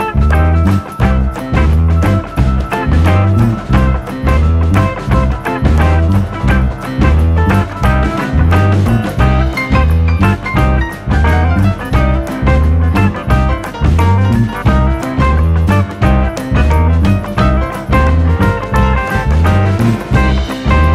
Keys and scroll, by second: 20.8 Escape.